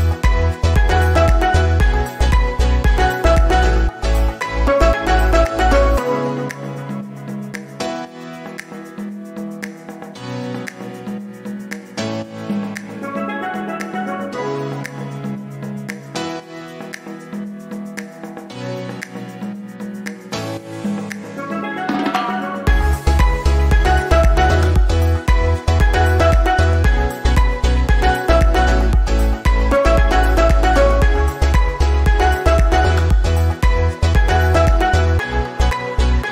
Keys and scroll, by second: 31.7 Delete, 34.6 Delete.